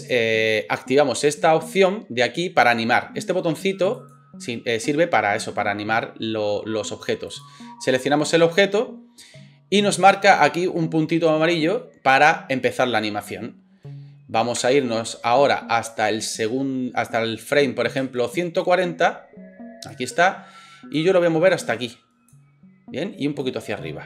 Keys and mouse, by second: 4.1-7.4 middle drag, 7.4-24.0 drag, 14.6 space, 18.0 space.